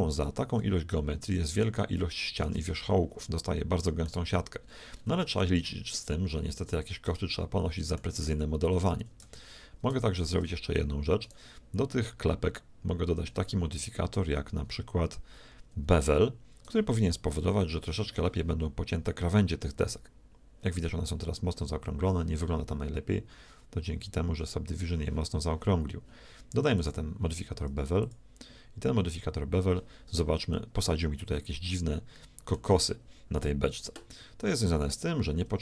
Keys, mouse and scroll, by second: 2.7 z, 9.3 Tab, 9.9 z, 10.3 Tab, 11.9-14.2 middle drag, 26.7-28.9 drag, 30.9-32.7 middle drag, 33.7-35.6 middle drag.